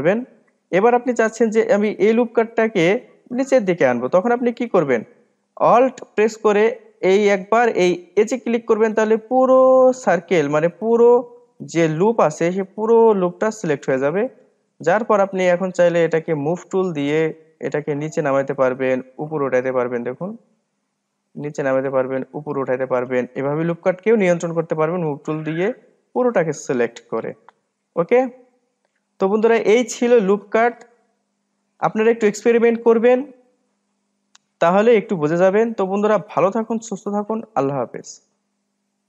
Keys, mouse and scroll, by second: 0.4-0.8 scroll down 2, 0.8 middle click, 1.6-2.1 scroll up 2, 2.1 middle click, 3.0-4.9 drag, 5.1-8.2 scroll up 2, 9.1 alt+click, 9.8-17.1 middle drag, 17.1-20.7 drag, 20.9-22.4 middle drag, 22.4 click, 24.4-26.5 middle drag, 26.5-28.1 drag, 29.5-30.5 scroll down 2.